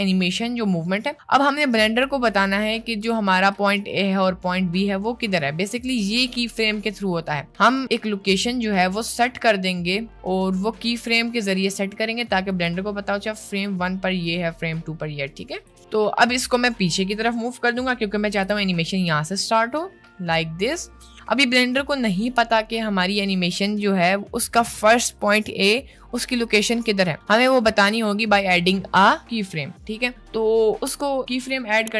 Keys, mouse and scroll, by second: 5.0-12.5 ctrl+drag, 14.3 click, 14.7 middle click, 18.4 g.